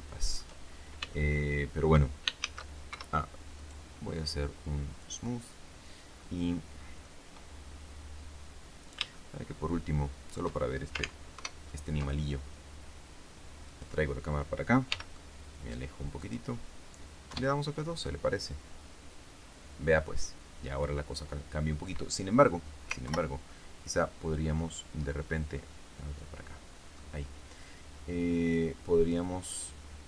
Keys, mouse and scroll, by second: 0.5-0.9 shift+scroll down 2, 1.0 shift+middle click, 2.3 shift+a, 2.8 shift+Escape, 3.5 right click, 4.9 click, 6.1 scroll up 2, 6.4 middle click, 6.7 scroll up 2, 9.1-10.4 shift+middle drag, 11.3 ctrl+alt+KP_0, 13.6 right click, 14.8 g, 14.9 click, 16.1 click, 17.2 F12, 22.9 ctrl+Left, 25.6-27.1 drag.